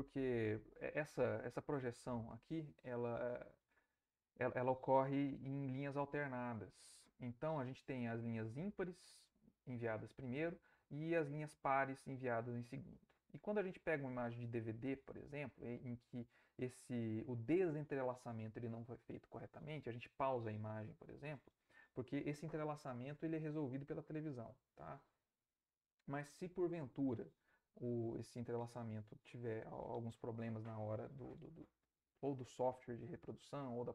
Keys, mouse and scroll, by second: 0.2 Left, 13.5 Right.